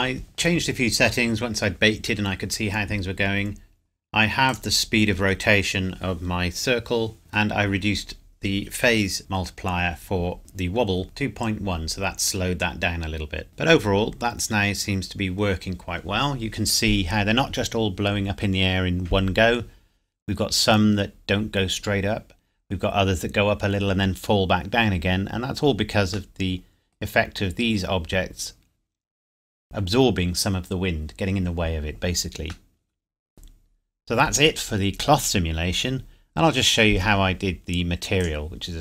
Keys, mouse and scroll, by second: 3.3 scroll up 1, 3.9 scroll down 1, 3.9 scroll up 1, 4.1-4.5 scroll down 1, 4.5 click, 7.3 middle click, 13.5 click, 13.9 scroll up 1, 15.9-17.9 scroll down 1, 25.5 scroll down 1, 25.7 scroll up 1, 25.7 scroll down 1, 26.3 middle click, 32.7 middle click, 33.8 scroll up 1, 38.2 click.